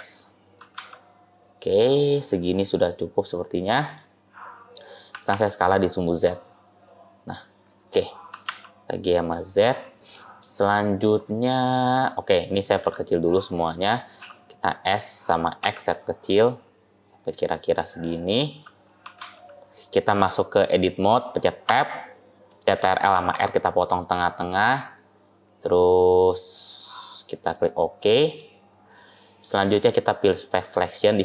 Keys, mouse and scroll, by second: 0.5 g, 1.8 middle click, 5.0 s, 8.2 g, 9.3 middle click, 9.6-10.7 scroll up 3, 10.1 middle click, 10.7 middle click, 11.1-11.4 scroll up 2, 11.5 shift+middle click, 12.6 s, 14.1 s, 18.9 g, 21.5 Tab, 23.0 ctrl+r, 27.0 middle click, 28.5-28.9 scroll down 2, 28.9 middle click, 29.4-30.1 scroll up 1, 30.5 click.